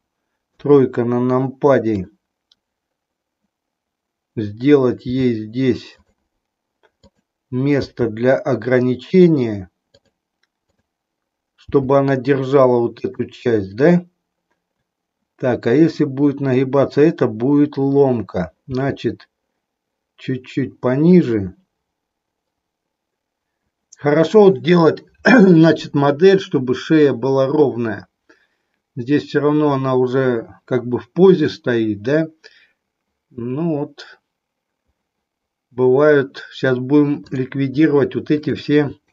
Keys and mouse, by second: 0.4 KP_3, 1.8 click, 5.1 g, 7.1 click, 7.8 g, 10.6 click, 11.7 g, 12.9 click, 18.7 g, 21.1 click, 38.3 shift+click.